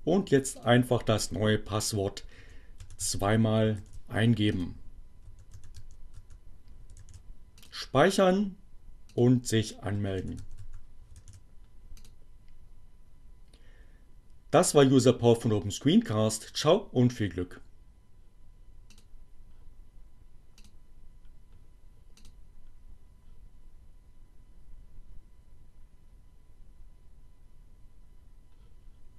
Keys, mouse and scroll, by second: 1.1 8, 1.3 Return, 3.3 click, 4.6-9.4 typing, 6.7 click, 9.5 click, 10.9 click, 11.4-13.1 typing, 13.4 click, 21.7 click, 23.4 click, 25.0 click.